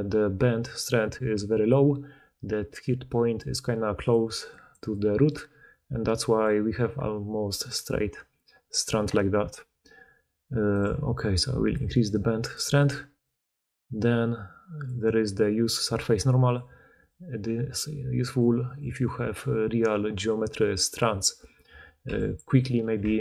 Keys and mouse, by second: 2.1-6.3 typing, 7.7 d, 7.7 d, 7.8 d, 12.8 d, 13.2 click, 13.7-16.5 middle drag, 16.5 click, 16.9 middle click, 17.0 click, 18.2 middle click, 18.6 click, 22.0 b.